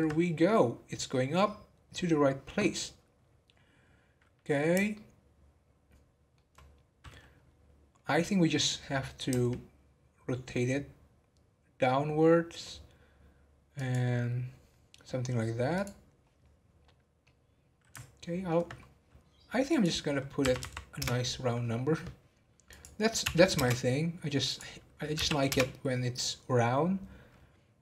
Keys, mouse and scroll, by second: 1.4 scroll up 1, 4.9-6.8 shift+middle drag, 6.8 scroll down 4, 7.4-8.3 scroll up 1, 8.3-9.3 scroll up 1, 9.3 r, 15.7 click, 17.2-19.7 middle drag, 19.7 click, 20.6 3, 22.7-27.6 drag.